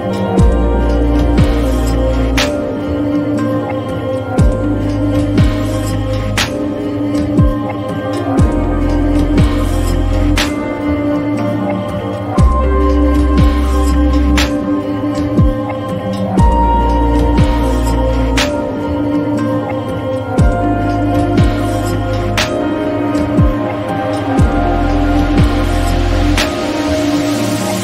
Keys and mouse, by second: 1.3 click, 2.3 click, 8.3 click, 9.2 click, 10.9 shift+click, 11.3-12.5 right drag, 13.1 click, 15.8 click, 16.4 shift+click, 16.9-18.0 right drag, 21.8 alt+click, 22.6 shift+drag.